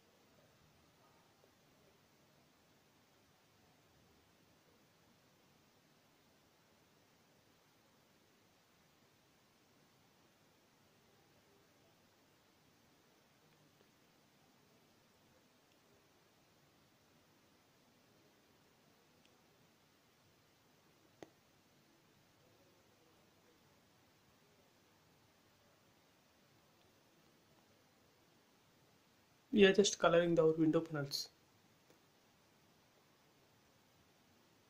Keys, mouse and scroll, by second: 1.6 m, 1.7 click, 2.9 Left, 4.8-6.1 typing, 5.7 Return, 6.3 middle click, 7.1 scroll up 1, 7.7-10.3 middle drag, 10.3 m, 10.5 click, 11.8 Left, 14.1-15.3 typing, 14.9 Return, 15.7 middle click, 16.7 scroll down 1, 19.0 ctrl+z, 19.9 click, 20.2 scroll up 1, 22.1 scroll down 1, 23.1 click, 23.5 scroll up 1, 23.7 middle click, 23.8-25.2 middle drag, 25.2 b, 27.9 click, 30.3-32.2 scroll down 1.